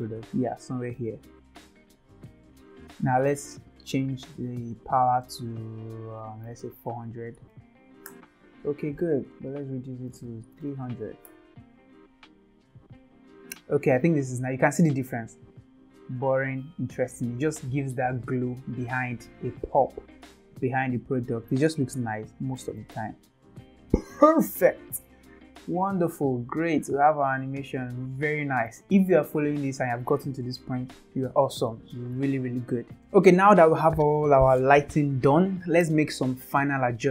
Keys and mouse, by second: 0.1 middle click, 1.7-2.7 drag, 3.1 middle drag, 4.4-9.1 drag, 6.7 KP_0, 9.4-13.4 drag, 10.7 KP_0, 16.9 click, 22.7 middle click, 23.7 space, 23.8 space, 25.1 click, 25.6 space, 26.6 space, 28.1 click, 28.5 space, 29.2 space, 32.6 space, 33.0 space.